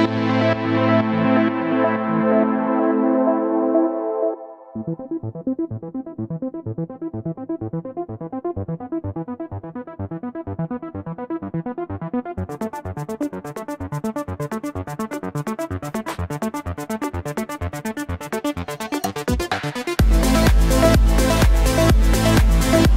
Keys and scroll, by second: 5.4 v.